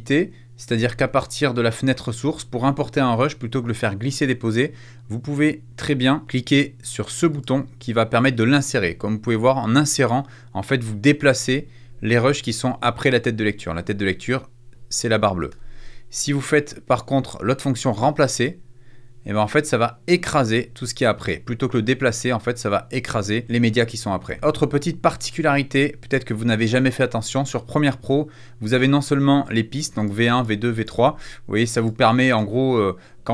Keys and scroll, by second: 15.4 super+z, 24.2 super+z.